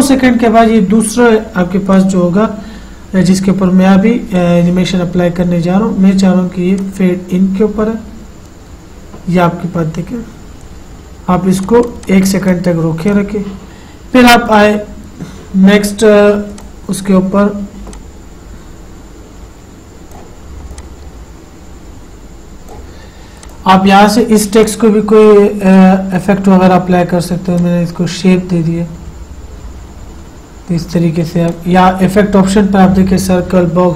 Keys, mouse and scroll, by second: 2.3 click, 7.1 click, 11.9 click, 16.9-27.8 drag, 31.8 click.